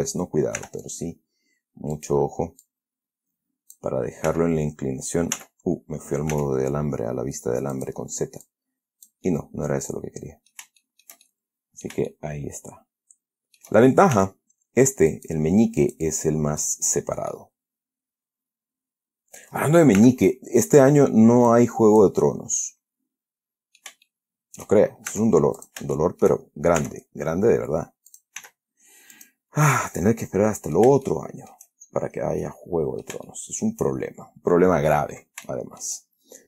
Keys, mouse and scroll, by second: 0.9 r, 2.3 click, 3.0-4.3 drag, 4.6 z, 5.7 z, 6.6 s, 8.1 click, 8.8 click, 9.6-11.0 middle drag, 11.1-12.4 shift+middle drag, 12.7-14.1 shift+middle drag, 14.5 e, 15.4 click, 16.1-17.1 drag, 17.6-19.9 middle drag, 20.3 r, 21.0 click, 21.8 click, 22.5-24.3 middle drag, 24.4 shift+middle click, 25.4 shift+s, 25.9 shift+click, 26.3 shift+middle click, 27.1 e, 28.4 click, 28.7 s, 29.5 click, 30.1 scroll down 1, 30.2-31.3 drag, 31.3 shift+middle click, 31.4 shift+click, 32.0 shift+middle click, 32.3-32.7 shift+scroll down 1, 32.7 click, 33.5 shift+middle click, 33.9 shift+click, 34.1 shift+middle click, 34.2-35.8 shift+scroll down 1, 35.8 shift+click.